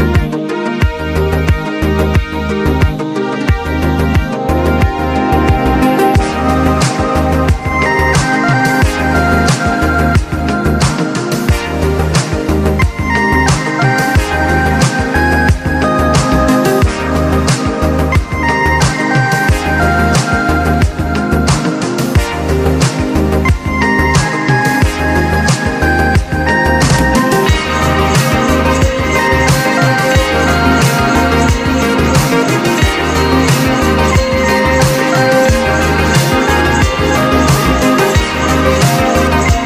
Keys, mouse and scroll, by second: 1.5 shift+click, 2.2 right click, 2.9-6.4 drag, 6.4 right click, 9.0 right click, 9.5-12.3 drag, 17.7 click, 18.8 click, 20.0 click, 22.2-22.8 scroll up 1, 22.8 scroll down 1, 23.9 click, 24.5-25.5 scroll down 1, 26.8 scroll up 1, 27.0 ctrl+z, 29.3 click, 29.6 scroll down 1, 29.7-31.1 scroll up 1, 31.3 click, 32.9-37.3 drag, 37.3 click.